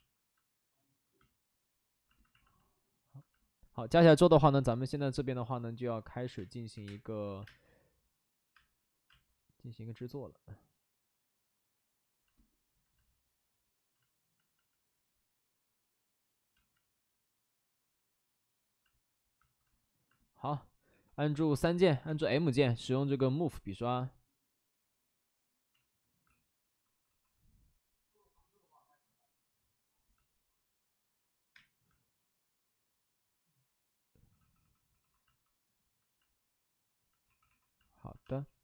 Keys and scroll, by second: 2.4 space, 6.3-7.4 typing, 8.5 space, 9.0 space, 13.9 ctrl+z, 14.1 ctrl+z, 14.3 ctrl+z, 16.5 ctrl+z, 20.8 3, 21.9 b, 22.1 m, 22.4 m, 25.7 ctrl+z, 26.2-27.0 typing, 31.5 space, 34.3 d, 34.5 d, 34.8 d, 34.9 d, 37.2 d, 38.2 space.